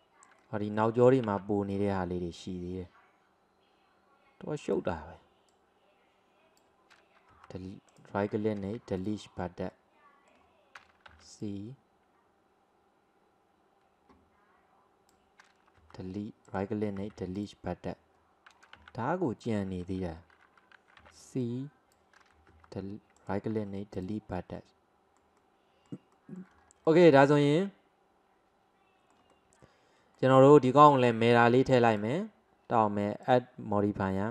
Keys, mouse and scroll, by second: 1.3 c, 8.6 Delete, 9.8-11.2 middle drag, 11.2 c, 17.0 Delete, 18.8 x, 21.0 c, 23.6 Delete, 24.6-26.6 middle drag, 26.6 scroll down 2, 26.9-31.4 middle drag, 31.4-33.3 drag.